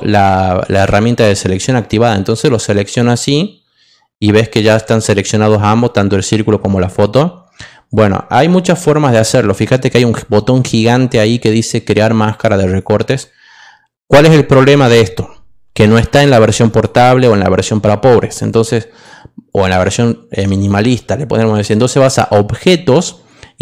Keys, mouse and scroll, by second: 1.7-2.9 drag, 11.1 click, 18.4 click, 19.8 click, 22.8 click.